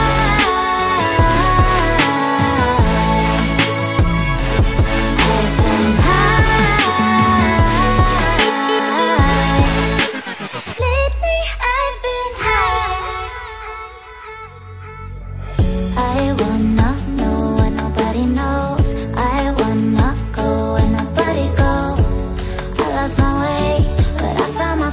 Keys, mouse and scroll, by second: 0.8 ctrl+z, 1.7 alt+scroll up 1, 1.7 alt+scroll down 1, 1.8 alt+scroll up 1, 2.3 Delete, 3.5 double click, 3.9 scroll down 1, 4.0 scroll up 1, 14.4 double click, 16.7 alt+scroll down 1, 16.8 alt+scroll up 1, 17.0 alt+scroll down 1, 17.0 alt+scroll up 1, 17.9 right click, 23.7 alt+click, 24.8 ctrl+j.